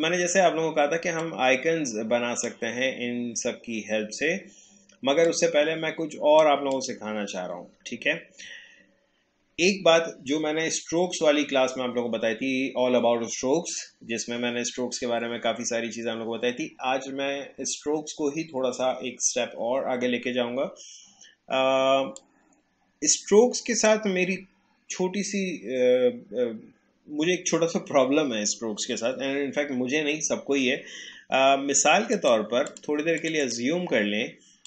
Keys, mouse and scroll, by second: 1.2-4.8 drag, 5.2-6.8 drag, 8.4-9.6 alt+scroll up 1, 22.2-26.4 drag, 32.1-34.6 drag.